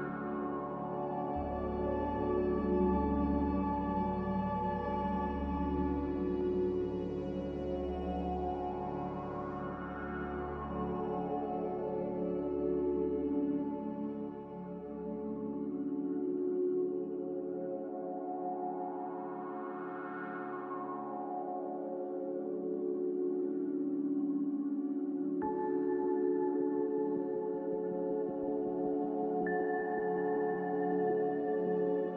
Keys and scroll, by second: 1.5 s, 2.9 s, 4.3 typing, 5.3 Tab, 6.0-6.7 typing, 8.1 typing, 10.3 a, 12.4 5, 18.1 1, 23.8 ctrl+c, 28.1 ctrl+v, 29.9-30.3 typing.